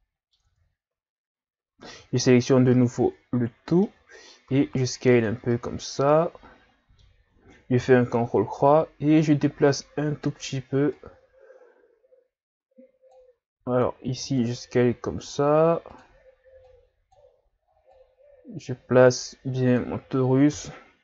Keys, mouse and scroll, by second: 0.5 Tab, 1.9 a, 2.2 a, 2.7-4.5 middle drag, 4.5 s, 5.5-7.8 middle drag, 7.8 ctrl+KP_3, 8.8-9.6 scroll up 1, 9.6 click, 13.6 s, 16.6 click, 20.5 KP_3.